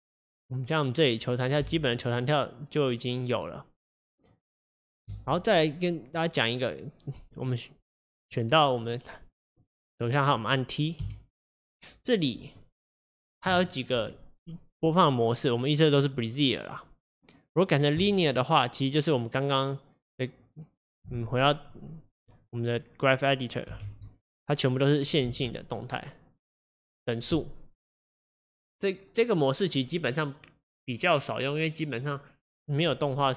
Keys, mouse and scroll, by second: 1.6 space, 5.2 space, 6.2-7.6 drag, 8.9-18.1 drag, 25.3 space.